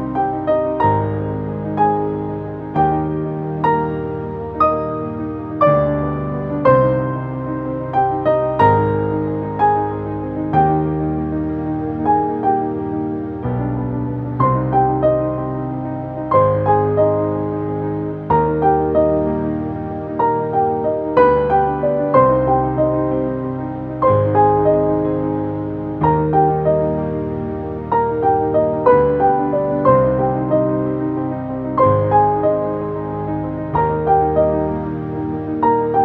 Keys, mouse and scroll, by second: 1.0-2.2 typing, 3.5-4.2 typing, 6.9 click, 8.5 Down, 12.6 click, 15.4 click, 15.9 ctrl+z, 16.9 shift+click, 17.9 ctrl+space, 18.0 ctrl+click, 18.7 space, 19.1-21.3 drag, 25.7 click, 26.4 space, 28.1 click, 28.4 Up, 29.7 space, 30.0 ctrl+click, 30.6 t, 31.3 click.